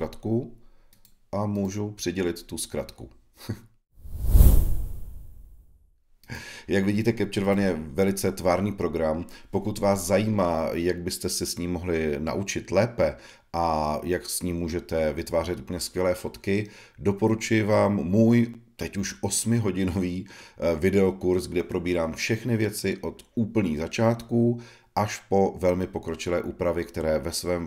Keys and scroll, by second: 22.3 [, 25.4 b, 26.6 e.